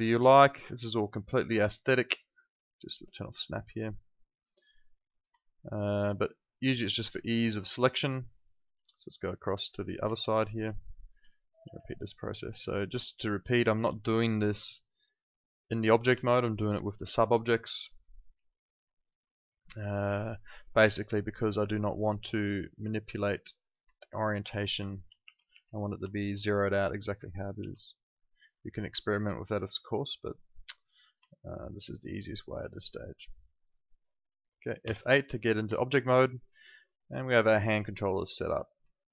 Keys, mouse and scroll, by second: 5.4 alt+click, 7.0 alt+right click, 7.3 alt+middle click, 7.8 alt+right click, 8.1 alt+middle click, 9.5 click, 10.1 alt+middle click, 10.3 alt+right click, 10.7 click, 11.2 alt+click, 11.7 e, 12.4 click, 13.9 alt+click, 16.2 alt+click, 16.7 alt+right click, 17.0 alt+click, 17.3 alt+middle click, 18.3 r, 19.1 click, 19.9 alt+click, 20.8 alt+click, 23.9 alt+click, 24.8 alt+click, 25.2 r, 25.5 e, 26.1 alt+click, 27.5 w, 27.9 click, 31.3 alt+click, 32.6 alt+right click, 32.9 alt+middle click, 33.2 alt+right click, 33.5 alt+middle click, 33.7 alt+right click, 34.8 F8, 35.8 alt+middle click, 36.1 alt+right click, 36.4 alt+click, 36.8 alt+middle click, 37.1 alt+right click, 37.4 alt+click, 37.7 alt+middle click, 37.9 alt+right click, 38.2 alt+click, 38.9 alt+middle click.